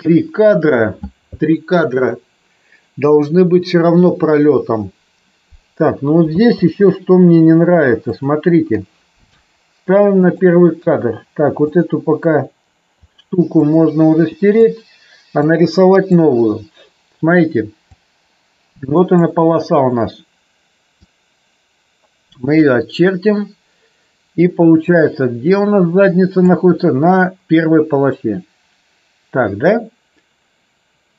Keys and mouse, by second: 6.6 space, 10.2 click, 13.6-14.6 drag, 17.9-19.2 drag, 21.0-22.6 drag, 24.9-26.5 drag.